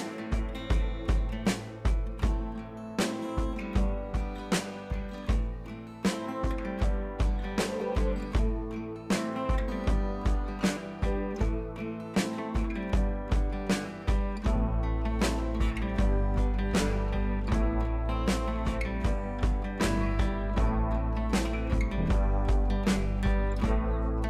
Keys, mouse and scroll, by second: 0.8-2.2 drag, 2.7 ctrl+v, 5.5-6.4 drag, 20.2 click, 21.6 scroll up 1, 21.7 scroll down 1, 22.6 ctrl+t, 23.3-24.0 alt+click.